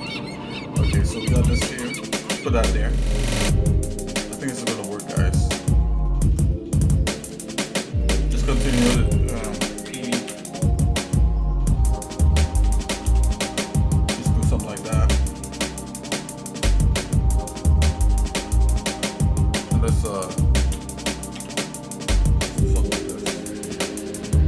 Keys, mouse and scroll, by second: 0.0 g, 4.4 shift+middle click, 6.0 shift+middle click, 6.5 middle click, 7.2 click, 7.6 shift+click, 8.0 shift+middle click, 9.8 e, 12.6 g, 15.0 shift+middle click, 20.8 e.